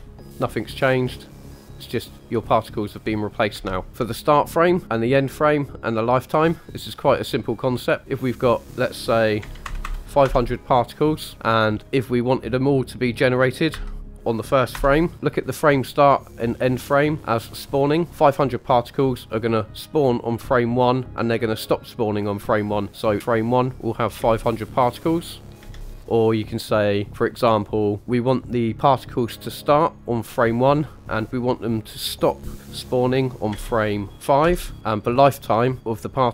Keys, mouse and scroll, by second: 3.5 space, 3.9 scroll up 3, 8.6 click, 9.8 KP_0, 11.7-14.7 drag, 23.5-23.8 drag, 24.2 space, 25.6 space, 30.6-34.4 drag.